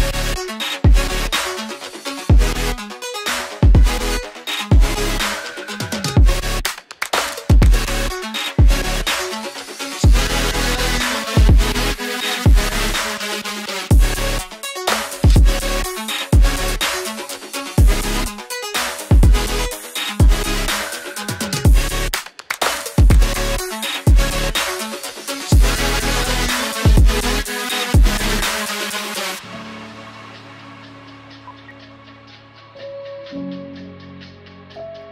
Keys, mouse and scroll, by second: 0.6 space, 1.3 ctrl+click, 2.1 ctrl+click, 2.2-4.1 scroll down 1, 5.9 scroll down 1, 7.1 F2, 8.0 double click, 9.8 F2, 11.0 shift+click, 13.0 ctrl+z, 13.6 double click, 15.4 F2, 17.0 ctrl+z, 18.0 ctrl+z, 18.4 scroll down 1, 20.8 double click, 21.4 ctrl+z, 21.7 F2, 23.6 ctrl+z, 28.3 double click, 31.5 ctrl+z.